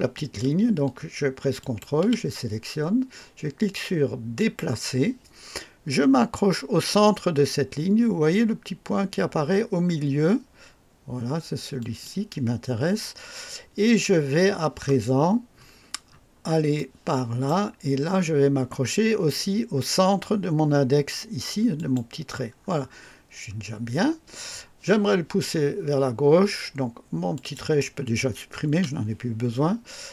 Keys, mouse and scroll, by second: 1.5 ctrl+click, 4.3 click, 11.7 click, 15.5 scroll up 2, 16.0 scroll up 2, 16.7 right click, 21.7 click, 22.5-23.5 scroll down 3, 27.3 click, 28.7 Delete.